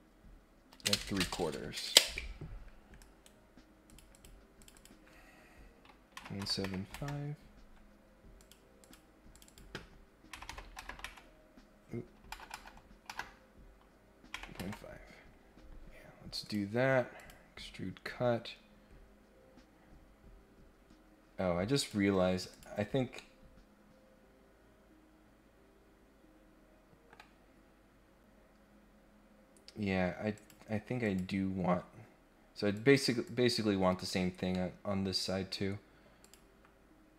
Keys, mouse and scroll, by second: 3.0 right click, 3.8 click, 4.1 click, 4.6 click, 4.7 click, 8.3 click, 8.8 click, 9.3 click, 16.4 click, 17.2 click, 21.7 click, 22.5 click, 23.1-27.1 middle drag, 30.3 click, 31.0 click, 32.7 click, 33.2 click, 34.5 middle click, 36.2 click.